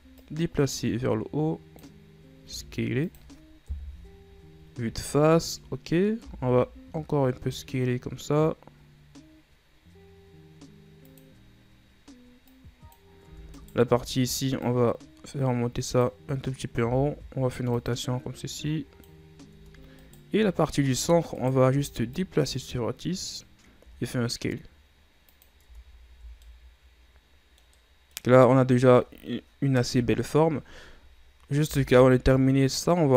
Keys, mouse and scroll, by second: 0.3-2.6 drag, 2.6 s, 3.8 KP_1, 5.4-6.3 shift+scroll up 2, 6.3 s, 12.6 click, 13.4 Tab, 13.6 right click, 14.0 Tab, 14.7-17.0 drag, 17.0 r, 18.7 click, 19.6 Tab, 20.1 right click, 20.4 Tab, 21.5 alt+right click, 22.2-23.9 drag, 23.9 s, 25.8 Tab, 26.0 scroll down 3, 26.2 a, 26.6-30.0 middle drag, 30.0 KP_7, 31.8 b.